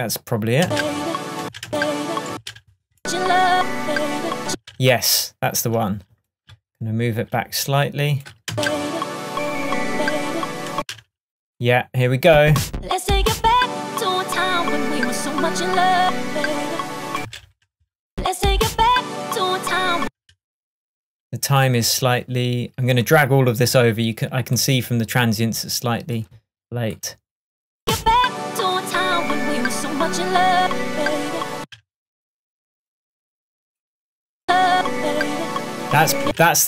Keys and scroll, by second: 0.7 space, 4.5 space, 10.8 space, 17.2 space, 20.0 space, 31.6 space, 36.3 space.